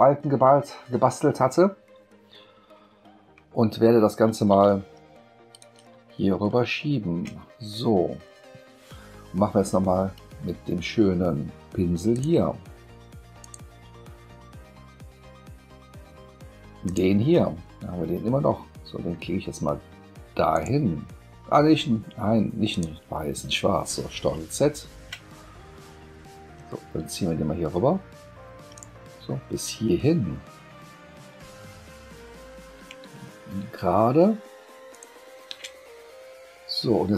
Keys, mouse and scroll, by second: 2.4 ctrl+scroll, 2.6 ctrl+scroll down 1, 3.9 space, 5.5 click, 5.9 space, 6.9-7.2 ctrl+scroll up 2, 12.1 click, 13.4 click, 16.9 click, 20.5 click, 22.7 click, 24.3 ctrl+z, 28.7 click, 34.9 shift+click.